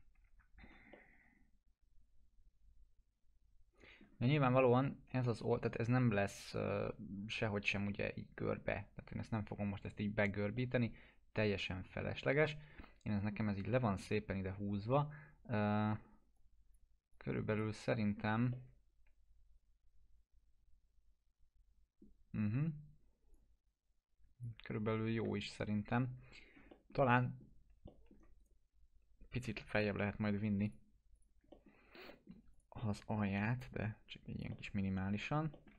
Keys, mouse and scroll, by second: 0.3 F4, 0.6 scroll down 1, 0.9-4.1 alt+middle click, 3.5 middle click, 4.3 scroll up 1, 10.3 scroll up 1, 10.6-13.1 alt+middle drag, 13.5 scroll down 1, 16.4-17.0 drag, 18.0 scroll down 1, 18.5-23.4 middle drag, 23.4-24.6 drag, 24.8 ctrl+z, 25.8 scroll up 1, 26.7 alt+middle click, 28.4 right click, 29.8 click, 31.5 alt+middle click, 32.1 alt+middle click, 32.5 click, 33.7-35.4 click, 34.5-35.5 alt+middle drag.